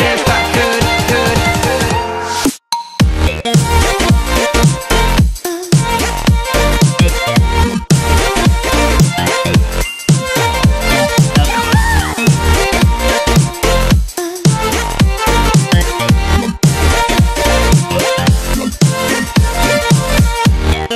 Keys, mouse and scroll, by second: 0.8-1.7 drag, 5.9 space, 6.0 click, 6.2 space, 7.7 space, 7.9 click, 8.1 space, 8.8 ctrl+=, 9.7 ctrl+-, 10.9 ctrl+-, 11.4-16.5 typing, 11.6 click, 12.3 ctrl+-, 12.8 click, 13.6 click, 14.4 click, 15.0 click, 16.3 click, 17.4-17.9 click, 18.0 space, 18.1 click, 18.3 space, 18.7-19.7 click, 20.1 space, 20.3-20.9 click, 20.4 space.